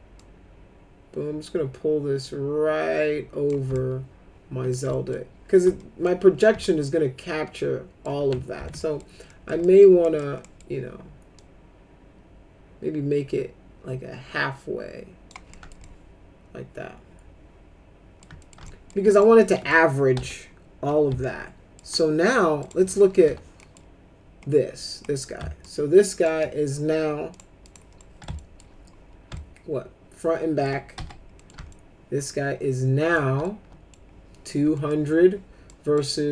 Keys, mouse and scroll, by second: 0.1-3.4 drag, 3.7 alt+middle click, 4.9 alt+middle click, 5.8 alt+middle click, 6.7-8.0 alt+middle drag, 8.5 ctrl+z, 8.8 middle click, 9.2 middle click, 9.6 alt+middle click, 10.0 middle click, 10.4 middle click, 11.4-15.2 drag, 15.5 alt+middle click, 15.8-18.2 alt+middle drag, 18.4 middle click, 18.6 alt+middle click, 19.1 click, 19.5 middle click, 20.2 F4, 21.2 alt+middle click, 22.6 click, 23.0 middle click, 23.2 w, 23.5 middle click, 25.6 shift+click, 27.3 click, 27.6 click, 27.9 middle click, 28.4 alt+middle click, 29.3-30.6 alt+middle drag, 30.9 F4, 31.4 middle click, 31.7-33.1 alt+middle drag, 33.4 alt+middle click, 34.7 middle click, 35.7 click.